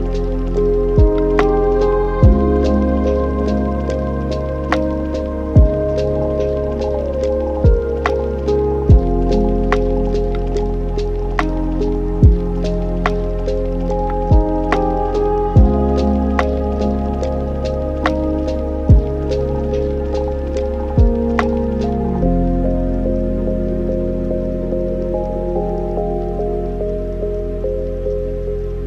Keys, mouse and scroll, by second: 1.0-1.9 middle drag, 1.9 shift+a, 5.7-6.3 drag, 6.3-7.5 middle drag, 7.5 drag, 9.1-10.0 middle drag, 10.0 click, 12.0-13.2 middle drag, 13.2-16.2 drag, 18.6-19.3 middle drag, 19.3 click, 19.7 shift+d, 22.0 click, 24.3-27.4 drag, 28.6-28.8 scroll down 10.